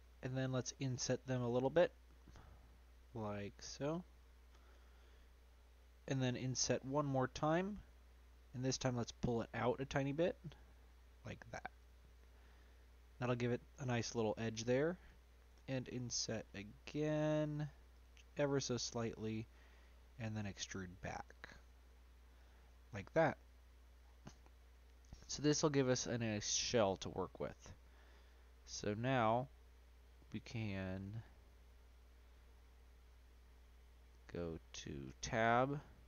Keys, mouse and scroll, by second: 7.9-9.5 middle drag, 9.5 click, 12.1-12.5 scroll up 2, 12.5-15.5 middle drag, 15.5 i, 18.5-20.2 middle drag, 20.2 e, 22.6 middle click, 23.1-24.5 scroll down 3, 23.3 middle click, 24.5 scroll up 1, 24.5-31.5 middle drag, 31.9 scroll up 1, 32.0 middle click, 32.5-35.0 scroll up 1, 35.0 Tab, 35.5-36.0 middle drag.